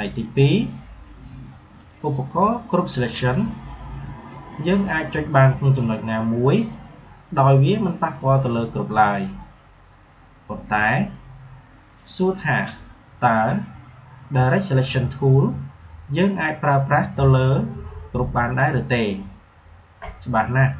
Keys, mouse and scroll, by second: 0.0 click.